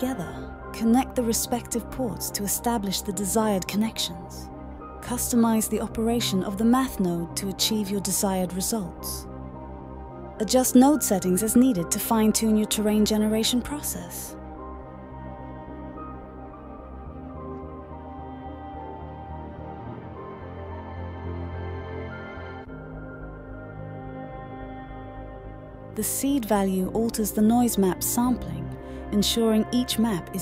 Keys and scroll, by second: 14.0 typing, 20.8-24.4 typing, 29.6 typing.